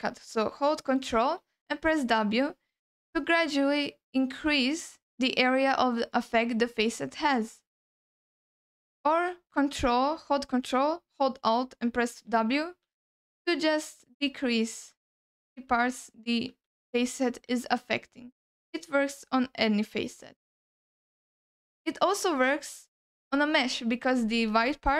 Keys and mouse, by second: 2.1 ctrl+w, 3.5 ctrl+w, 4.4 ctrl+w, 5.5 ctrl+w, 6.4 ctrl+w, 12.1 ctrl+alt+w, 12.7 ctrl+alt+w, 13.6 ctrl+alt+w, 14.2 ctrl+alt+w, 14.9 ctrl+alt+w, 15.6 ctrl+alt+w, 16.6 ctrl+alt+w, 17.6 ctrl+alt+w, 19.0 ctrl+alt+w, 19.5 ctrl+alt+w, 20.1 ctrl+w, 20.4 ctrl+w, 21.0 ctrl+w, 22.6 middle click, 24.2 middle click, 24.6 ctrl+alt+middle click.